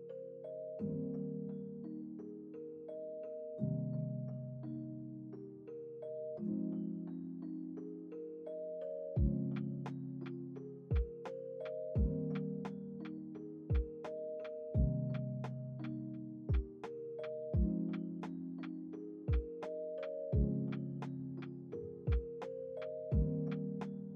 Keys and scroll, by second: 0.6 ctrl+s, 3.1 space, 22.1 space.